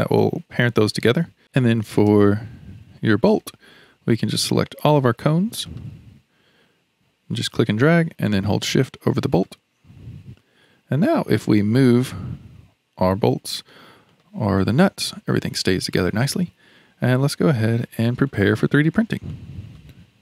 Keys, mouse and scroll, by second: 1.4-3.0 scroll up 2, 4.3 click, 4.8-5.7 scroll down 1, 5.7 shift+click, 6.2-6.7 scroll up 1, 7.3 click, 11.2 click, 11.9 g, 14.1 click, 14.6 g, 17.4-20.2 shift+middle drag.